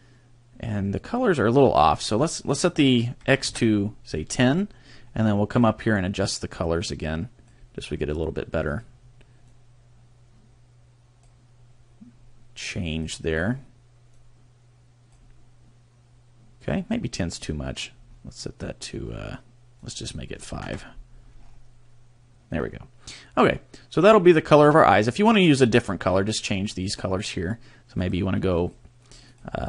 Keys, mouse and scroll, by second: 2.0 click, 6.4 click, 8.7 click, 12.9 click, 13.4 click, 18.1-19.1 scroll down 1, 19.1-19.8 scroll down 3, 19.8 click, 21.4-22.3 scroll up 4, 28.0 click, 28.6 click, 29.1 click, 29.3 click.